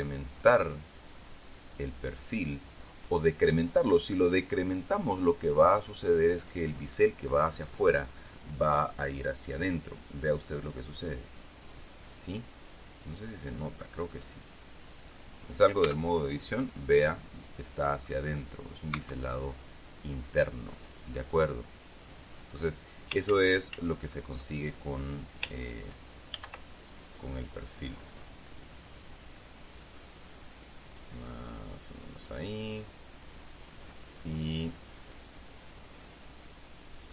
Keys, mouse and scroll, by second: 11.2-13.7 drag, 14.1-15.9 middle drag, 16.4 Tab, 17.8-18.9 middle drag, 19.5 Tab, 21.9-23.3 middle drag, 23.8 ctrl+z, 26.9 ctrl+b, 33.1 click, 36.1-37.1 drag.